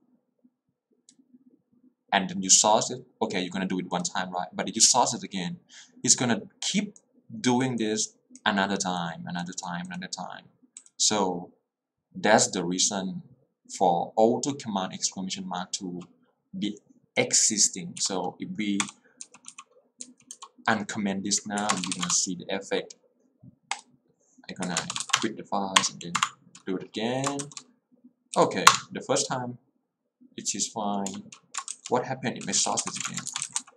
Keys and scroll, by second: 18.1-20.8 typing, 21.6 Escape, 22.0 w, 22.2 Return, 24.7 Escape, 25.1 q, 25.3 Return, 25.8 Up, 26.2 Return, 28.4 w, 28.8 Return, 32.4-33.7 typing.